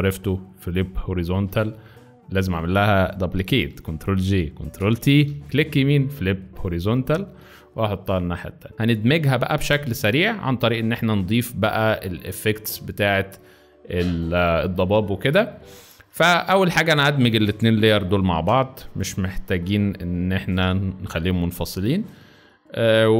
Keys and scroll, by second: 2.3 `, 3.0 ctrl+Escape, 3.7 ctrl+j, 4.7 ctrl+t, 8.7 shift+z, 9.2 shift+space, 9.8 shift+z, 18.4 ctrl+e, 19.5 z, 20.7 space, 21.6 space.